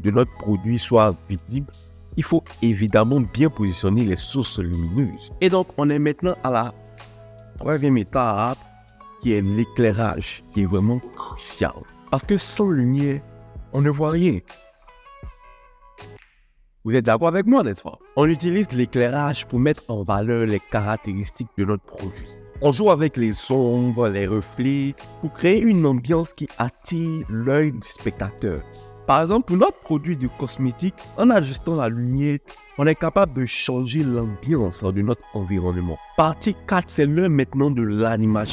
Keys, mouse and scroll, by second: 28.9 click, 31.7 click, 32.9 click, 35.4 click.